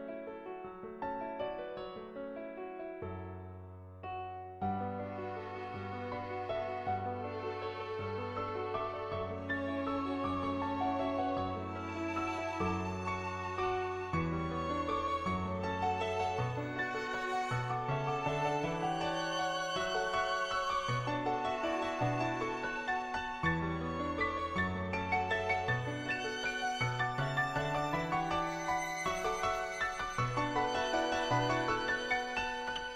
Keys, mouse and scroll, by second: 4.9-7.6 typing, 5.1 click, 5.6 ctrl+z, 6.8 click, 7.4 ctrl+z, 7.8 click, 8.5 click, 9.2 [, 9.4 ], 9.6 ], 9.8 click, 11.0 ], 11.4 click, 12.0 click, 12.8 click, 14.0 click, 14.8 ], 15.2 ], 15.3 ], 15.6-16.7 drag, 16.7 ], 16.7 [, 17.0 [, 17.2-18.6 drag, 18.7 [, 19.2 click, 19.2 [, 19.9 ], 20.1 click, 21.1 click, 21.9 click, 22.2 click, 22.8-26.8 typing, 23.4 click, 24.2 click, 26.8 click, 32.1-32.9 drag.